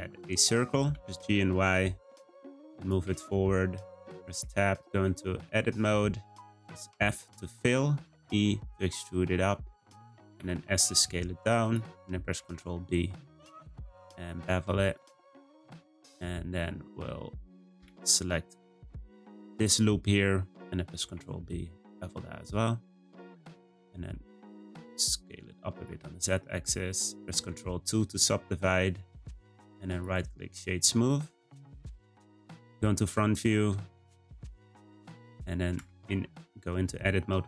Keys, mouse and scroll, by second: 0.9 g, 3.2 shift+middle click, 3.7-4.0 scroll up 2, 4.0 Tab, 4.7 shift+middle click, 5.3-6.6 scroll up 1, 6.6 f, 7.9 e, 10.4 s, 12.3 b, 17.8 2, 18.6 click, 18.9 click, 19.5 shift+middle click, 20.3-20.6 scroll up 1, 21.0 b, 23.4 a, 23.6 s, 25.9 Tab, 27.3 ctrl+2, 29.4-30.6 right drag, 30.6 middle click, 31.3-34.0 scroll down 1, 35.7 Tab, 36.1 a, 36.5-37.4 scroll up 2.